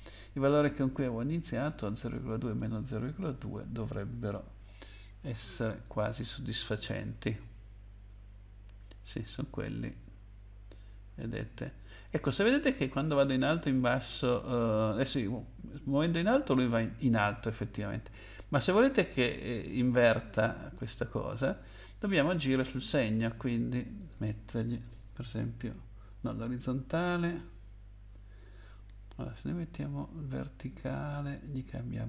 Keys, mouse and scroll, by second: 1.4 click, 2.3 BackSpace, 2.5 BackSpace, 3.3 2, 4.5 ctrl+s, 5.8 click, 19.6 click, 22.1 click, 24.0 click, 24.8 BackSpace, 31.9 click.